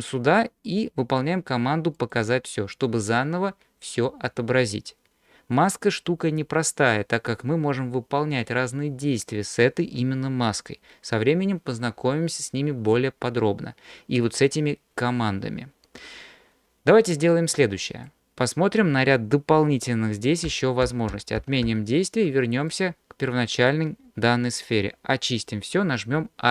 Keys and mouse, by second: 0.4-2.2 drag, 17.3 middle click, 20.0 ctrl+z, 20.5 ctrl+z, 20.9 ctrl+z, 21.2 ctrl+z, 21.4 ctrl+z, 21.7 ctrl+z, 22.7 middle click.